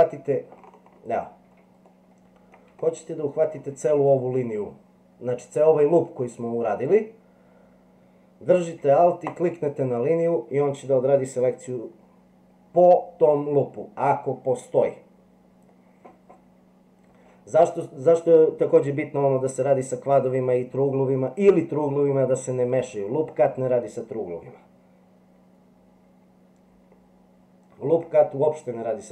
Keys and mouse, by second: 1.9 middle click, 2.9 shift+middle click.